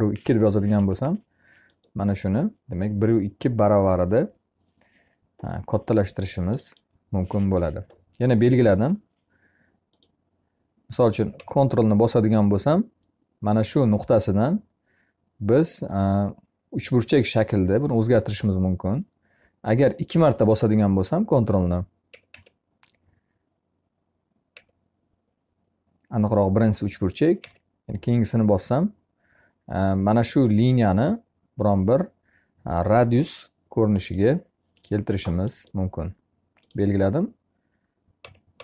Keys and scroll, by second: 0.6 Escape.